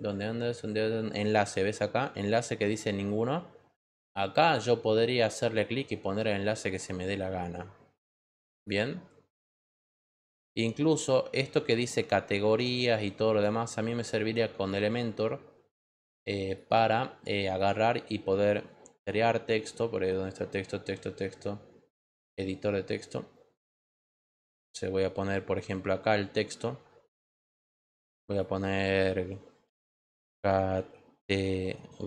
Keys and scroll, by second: 29.6 c, 30.7-32.0 typing.